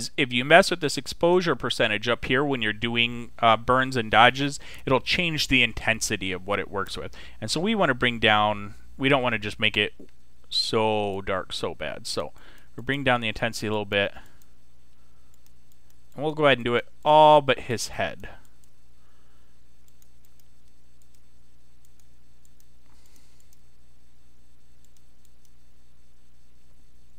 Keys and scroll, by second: 9.8 [.